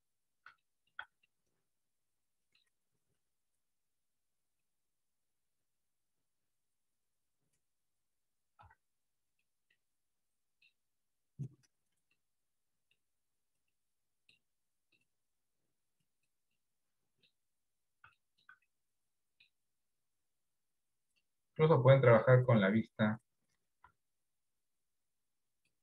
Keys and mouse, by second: 0.8 shift+middle click, 1.4-2.7 middle drag, 3.5-4.7 drag, 5.3 click, 6.3-8.1 drag, 8.7 r, 9.8-10.8 middle drag, 12.3 middle click, 13.7 middle click, 16.7 middle click, 18.3 shift+middle click, 18.8 middle click, 21.2-22.7 drag, 24.0 r.